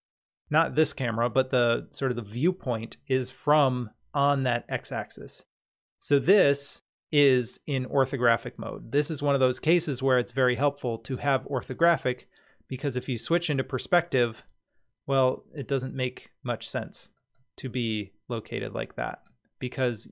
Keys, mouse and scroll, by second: 12.9 click, 17.2 click, 19.1 click.